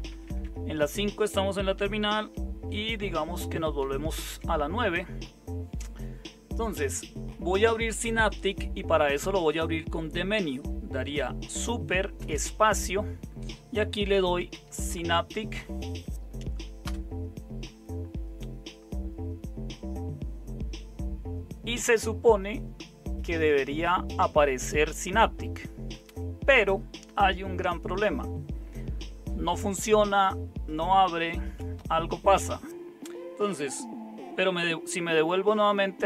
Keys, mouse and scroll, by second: 0.0-0.4 typing, 3.8 super+9, 12.1 super+space, 13.8-15.1 typing, 16.8 Return, 35.6 super+5.